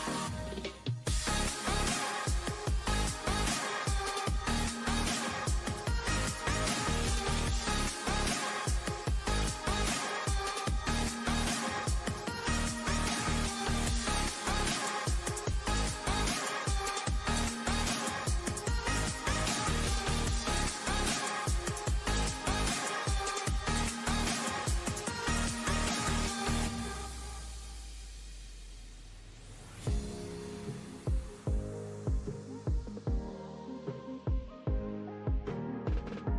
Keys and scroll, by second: 5.3 super+g.